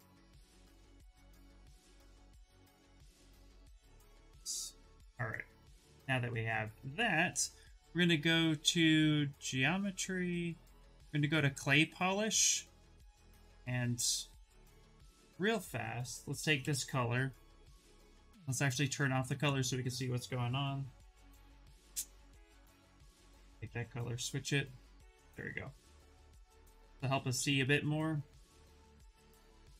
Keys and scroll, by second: 16.3 c, 23.0 c, 23.3 v.